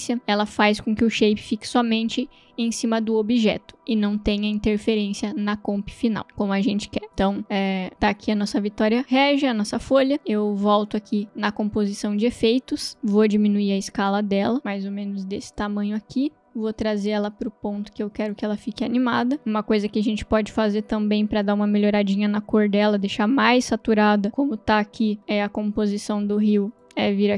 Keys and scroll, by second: 9.3 v, 13.7 s.